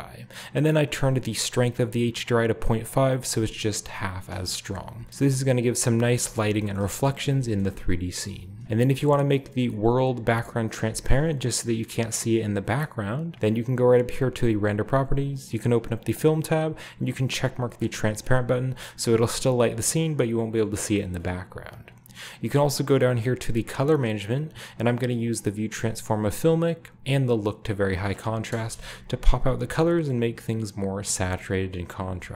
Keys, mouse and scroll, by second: 1.1-4.5 drag, 4.1-5.0 scroll up 1, 4.5 shift+middle click, 4.7 z, 6.2-6.9 shift+scroll up 2, 6.2-6.6 shift+middle drag, 6.8 shift+middle click, 6.9-7.7 shift+scroll down 2, 7.6-8.1 middle drag, 8.6 ctrl+b, 10.1 click, 11.0-11.8 shift+middle drag, 13.3 click, 15.5 click, 16.7 drag, 18.3-19.6 middle drag, 18.3-19.6 scroll down 1, 19.6 click, 20.0-21.2 middle drag, 20.7-21.6 scroll up 1, 22.5 drag, 22.9-27.1 scroll down 2, 23.2 click, 27.1-28.8 drag, 28.7 KP_0, 29.5-30.9 scroll up 1, 29.9-30.9 shift+middle drag, 31.2-32.3 shift+middle drag.